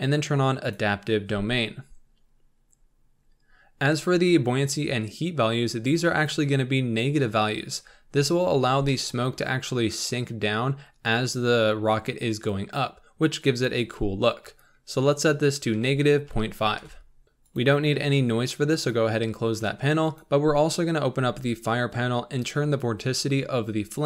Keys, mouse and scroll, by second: 0.6 click, 8.4-8.8 scroll down 4, 8.8-16.8 shift+middle drag, 16.8 click, 21.0-21.5 scroll up 4.